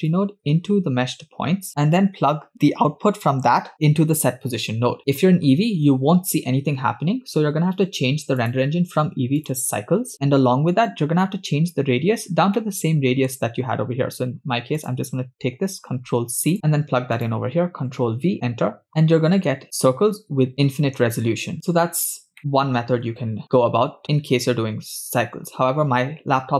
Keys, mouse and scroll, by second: 0.1-1.7 drag, 2.6-4.2 drag, 5.0 middle click, 7.3-7.6 scroll up 5, 8.4-9.7 drag, 10.7-11.3 scroll up 4, 11.6 scroll up 3, 12.4 scroll down 2, 12.6 middle click, 14.8-16.5 drag, 16.5 middle click, 17.2-18.4 ctrl+drag, 18.9-19.9 scroll up 9, 21.7 scroll down 4, 22.4 shift+middle click.